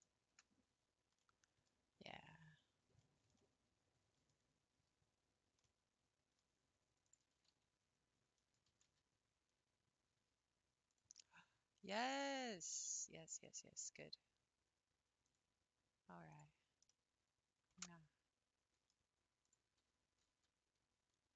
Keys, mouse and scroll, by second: 0.7 scroll down 3, 1.2 middle click, 2.0-2.6 scroll up 1, 3.0-4.8 shift+middle drag, 4.8 scroll up 2, 5.7-7.0 middle drag, 7.0 click, 7.4 g, 9.0 g, 11.3-13.4 middle drag, 13.4 click, 13.9 g, 16.3 click, 16.9-19.4 middle drag, 19.4 click, 19.8 g, 19.9 g.